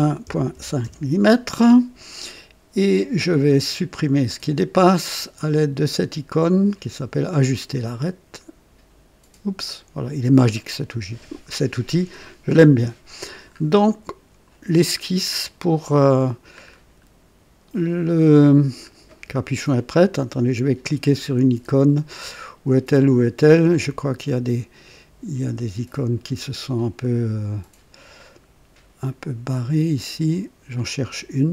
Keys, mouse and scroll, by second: 0.2 KP_Decimal, 0.5 KP_5, 0.8 Return, 4.2 click, 9.6 click, 10.9-11.3 scroll up 2, 11.3-12.8 scroll down 6, 13.3 scroll down 2, 13.9 right click, 14.7-15.0 scroll down 2, 15.4 right click, 16.7-17.1 scroll up 2, 18.0-18.4 scroll down 2.